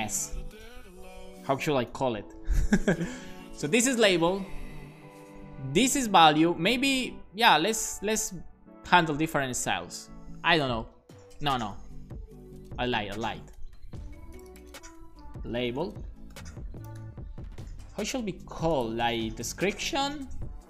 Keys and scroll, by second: 1.2 BackSpace, 1.9 shift+[, 2.7 super+s, 4.0 Right, 4.2 Right, 4.3 Right, 4.5 Right, 7.3 alt+shift+Right, 7.3-9.3 typing, 11.3 Down, 11.5 Down, 12.6 super+Right, 15.2-17.5 typing.